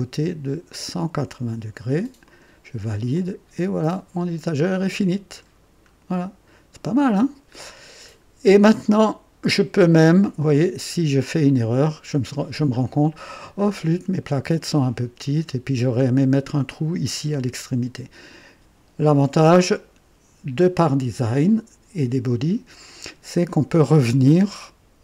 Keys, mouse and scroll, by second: 2.2 click, 3.1-4.4 drag, 4.8 click, 5.5 scroll down 2, 6.2 scroll up 2, 6.7-7.4 right drag, 7.6 scroll down 2, 8.5 scroll up 1, 9.9 right click, 10.5-12.4 drag, 12.7 scroll up 1, 13.3 right click.